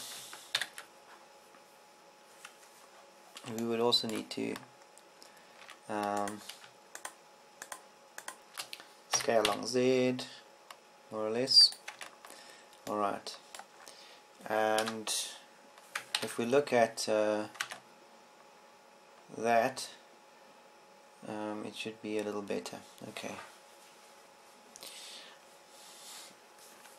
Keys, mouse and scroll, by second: 1.3 KP_1, 2.1 ctrl+KP_1, 7.2 Tab, 10.7 s, 13.3 click, 13.5 Tab, 16.4 KP_0, 17.8 ctrl+Up, 19.3 Tab.